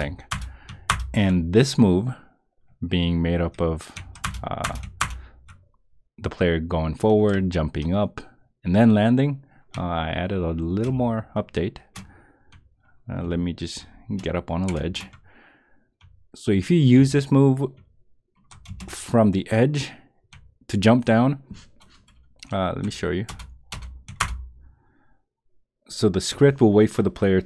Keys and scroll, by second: 0.9 Return, 4.2 Return, 5.0 Return, 10.8 space, 13.2 space, 14.8 space, 17.0 space, 18.6 space, 23.3 Return, 24.2 Return.